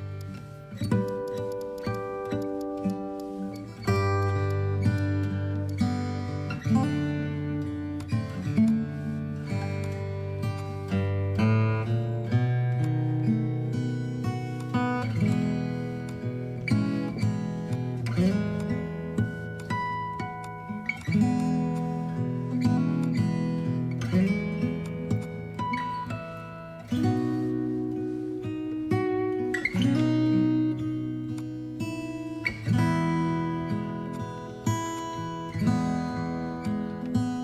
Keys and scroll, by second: 0.3 Up, 1.9 space, 4.8 Down, 5.3 Down, 13.7 ctrl+i, 20.1 ctrl+z, 33.4 space, 36.7 ctrl+alt+shift+e.